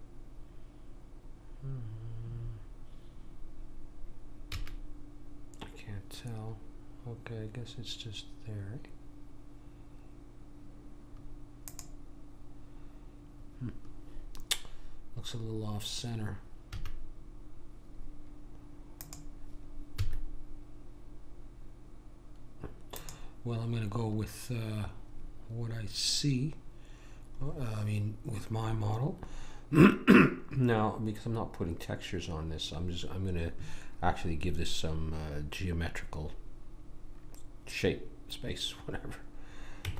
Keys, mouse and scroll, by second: 4.5 s, 16.7 a, 19.0 click, 20.0 s, 27.4-28.8 middle drag, 39.8 Tab.